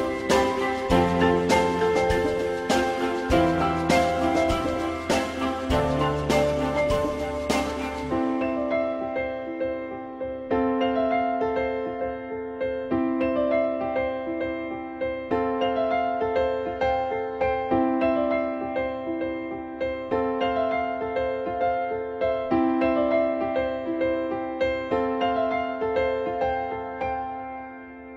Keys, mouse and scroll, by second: 1.2 shift+click, 4.0 click, 8.9 e, 10.3 click, 17.0 e, 20.1 u.